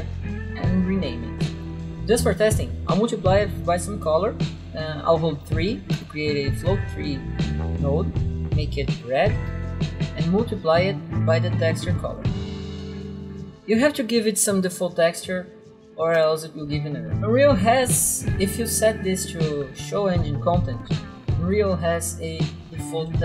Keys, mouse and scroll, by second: 1.4 ctrl+v, 1.6 Return, 1.9 click, 5.7 3, 6.0 click, 8.2 click, 8.3 double click, 8.7 double click, 9.5 double click, 9.7 click, 10.7 m, 10.8 click, 11.8 click, 12.5 click, 12.8 click, 13.4 click, 16.2 click, 18.8 click, 21.5 click, 22.2-23.2 typing.